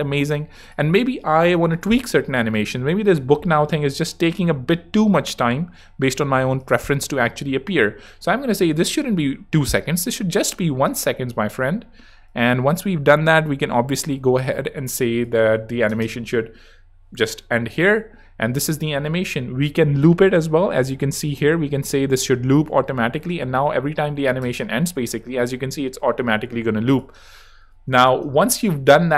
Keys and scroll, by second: 9.4 i, 9.6 Home, 10.8 space, 15.9 space, 24.4 space, 27.2 space, 27.8 super+space, 28.9 space.